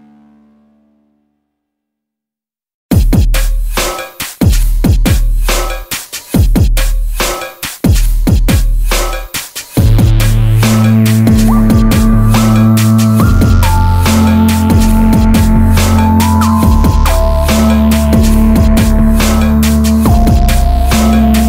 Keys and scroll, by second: 17.8 Tab.